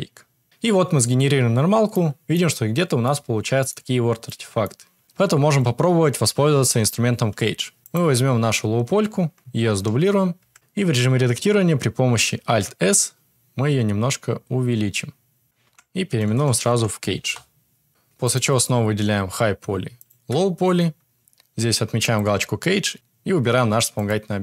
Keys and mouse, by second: 2.0 middle click, 3.0 middle click, 4.3 middle click, 9.7 shift+d, 10.5 Tab, 12.4 alt+s, 15.6 Tab, 15.6 F2, 17.2 Return, 18.2 click, 21.9 click.